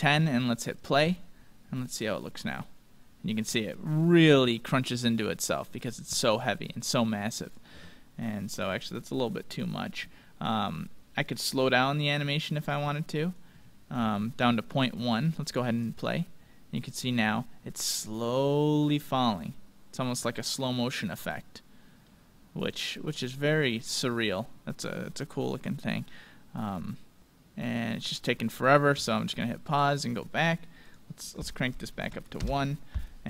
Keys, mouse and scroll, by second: 1.5 middle click, 2.0 middle click, 2.8-3.9 middle drag, 6.8-10.3 drag, 11.2-13.1 drag, 15.0-17.5 drag, 16.4 middle click, 17.5-19.6 middle drag, 22.6-24.5 middle drag, 27.2-30.0 middle drag, 29.7-32.7 drag.